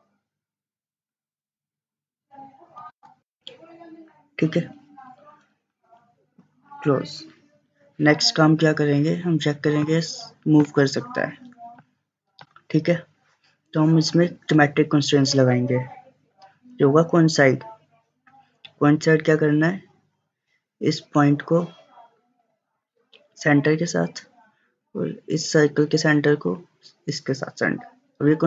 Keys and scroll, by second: 2.6-3.3 typing.